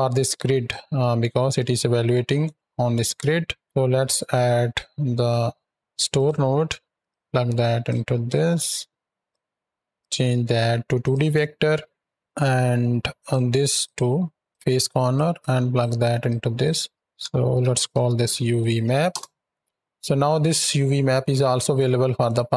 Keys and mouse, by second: 2.3 middle drag, 3.3 shift+a, 3.6 ctrl+x, 6.8 drag, 7.3 ctrl+click, 8.1-8.9 drag, 9.2 click, 12.2-13.1 drag, 13.7-14.5 drag, 15.0 click, 15.6-16.2 drag, 16.5-19.0 drag.